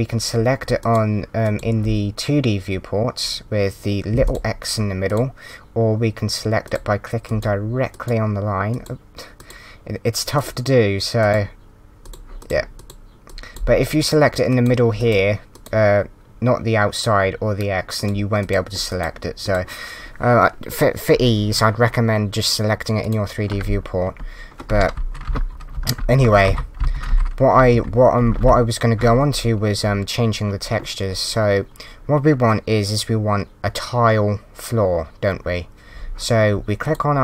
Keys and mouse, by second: 11.2 click, 18.0 click, 23.0 click, 23.6 s, 24.1 a, 25.2 Up, 25.3-28.9 typing, 36.8 click.